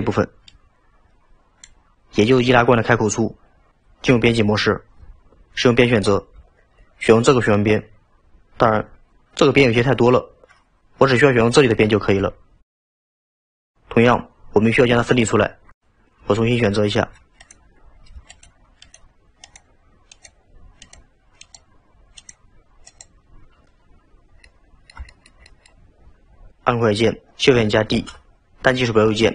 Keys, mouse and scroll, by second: 4.2 Tab, 7.3 alt+click, 17.4 click, 18.3 shift+click, 18.9 shift+click, 19.5 click, 20.1 click, 20.9 click, 21.4 click, 22.2 click, 22.9 click, 24.1-24.5 scroll down 2, 24.5-26.6 middle drag, 28.0 shift+d.